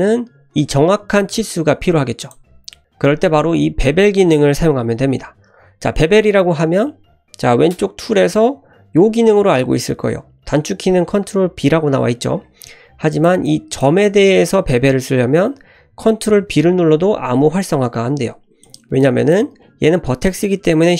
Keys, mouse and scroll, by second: 2.2 click, 2.8 shift+middle click, 2.8-3.1 scroll up 2, 13.1 click, 13.4 click, 16.4 ctrl+b, 18.6 click, 18.9 click.